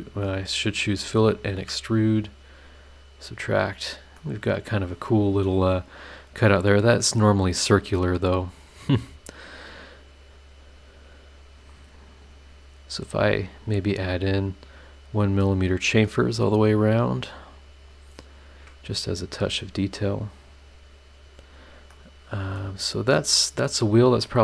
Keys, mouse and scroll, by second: 0.3 click, 0.7 click, 1.4 ctrl+click, 2.8 click, 4.1 middle click, 4.2 scroll down 1, 5.7 scroll down 2, 6.1 scroll up 2, 8.0 click, 10.7 click, 13.2 scroll up 2, 14.5 click, 15.6 click, 16.6 click, 17.3 click, 18.4 click, 20.1 click, 21.1-21.7 scroll down 2, 21.9 middle click, 22.0 click, 22.0 right click, 22.7 scroll down 1, 23.1 middle click, 23.2 click, 23.2 right click.